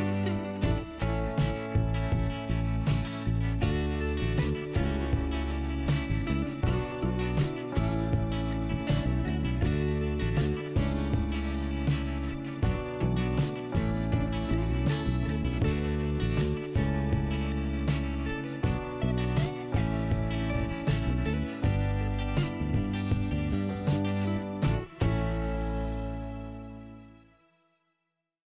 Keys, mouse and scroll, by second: 0.2 click, 2.3 click, 3.5 click, 5.5 click, 6.8 click, 9.2 click, 10.6 click, 12.1 click, 13.0 scroll up 1, 13.6 scroll up 1, 13.6 click, 15.4 scroll up 1, 15.6 click, 15.7 click, 16.3 click, 17.6 click, 18.9 click, 20.2 click, 21.1 click, 21.7 click, 23.0 click, 25.4 scroll down 1, 26.3-26.9 scroll down 1.